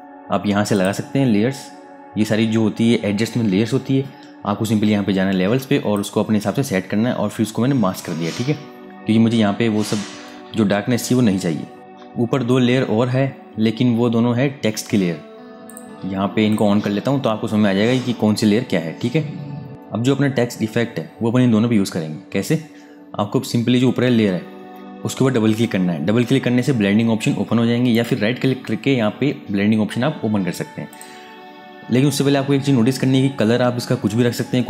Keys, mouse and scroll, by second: 5.7 click, 15.4 click, 27.6 right click, 30.6 click.